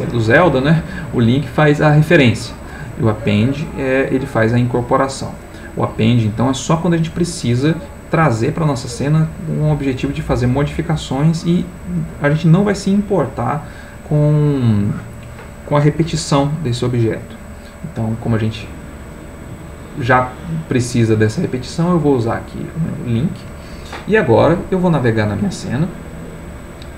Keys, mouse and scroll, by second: 22.8 click.